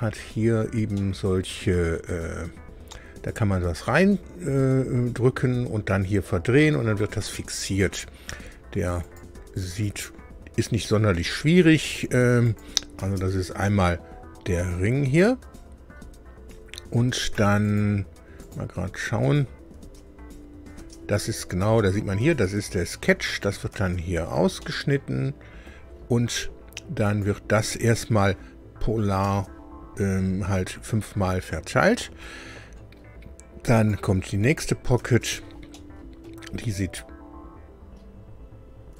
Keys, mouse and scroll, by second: 0.2-0.7 shift+scroll up 3, 0.9-2.1 middle drag, 9.0 click, 12.4 click, 13.0 space, 14.2-14.6 scroll down 2, 17.6 click, 18.4 click, 19.7 space, 20.7 space, 21.6 space, 23.3 click, 23.7 space, 24.6-25.8 drag, 27.0 click, 29.2 space, 33.7 click, 34.4 click, 34.9 space, 35.7 middle click.